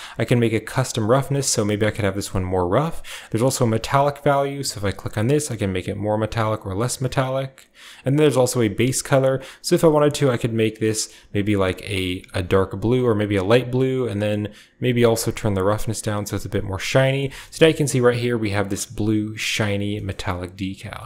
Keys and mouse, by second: 4.5-6.4 drag, 7.8 click, 8.6 click, 13.7-14.8 drag, 15.3-16.3 drag, 16.8 middle drag, 17.1 shift+middle click, 19.2 click, 19.2 middle click, 19.7 shift+drag, 20.9 click, 20.9 middle click.